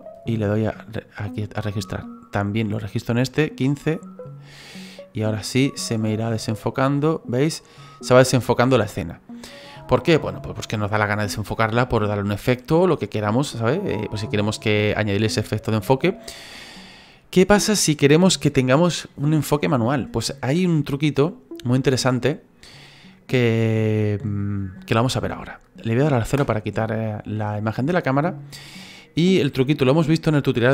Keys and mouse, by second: 0.0 right click, 0.5 click, 1.9 click, 3.6 right click, 12.8 click, 21.3 click, 26.3 KP_0, 27.3 middle click, 29.4 middle click.